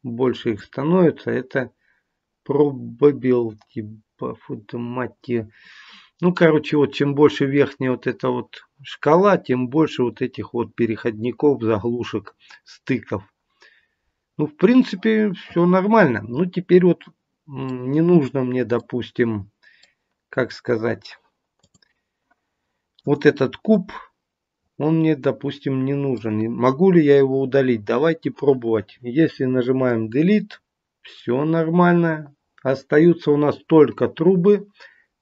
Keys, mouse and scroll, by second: 13.8-14.5 scroll down 3, 14.3-14.8 scroll up 2, 14.8 middle click, 18.7 middle click, 21.5 click, 22.9 click, 23.7 middle click, 25.9 middle click, 31.1 middle click.